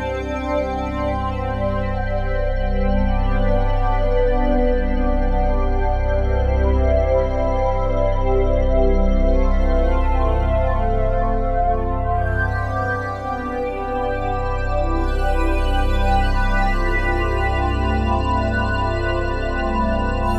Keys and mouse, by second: 0.0 click, 4.5 click, 5.7 click, 8.9 click, 12.6 click, 14.4 click, 16.0 click, 16.4 click, 17.6 click, 17.9 click.